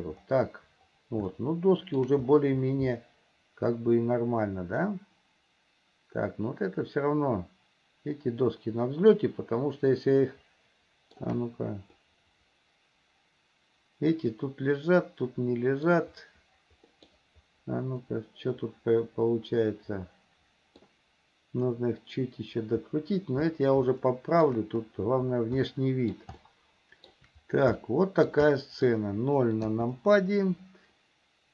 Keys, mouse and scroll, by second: 1.6 shift+middle click, 3.2-11.4 shift+middle drag, 12.2-16.3 middle drag, 17.2 middle click, 18.3-21.1 middle drag, 24.2 shift+middle click, 25.9 middle click, 26.6 shift+scroll up 1, 26.7 shift+middle click, 28.0 shift+middle click, 28.8 middle click, 30.0 KP_0.